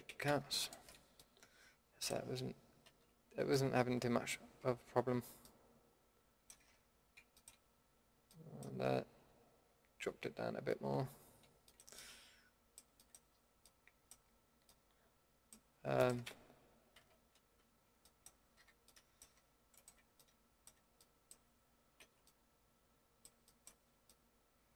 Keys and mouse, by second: 0.1 ctrl+z, 1.3 middle drag, 2.9 ctrl+x, 4.6 Tab, 6.6 Tab, 7.9 Tab, 8.7 Tab, 9.1 a, 9.5 a, 14.0 middle click, 16.9 ctrl+x, 17.7 ctrl+z, 18.6 a, 20.1-21.9 middle drag, 22.0 ctrl+x.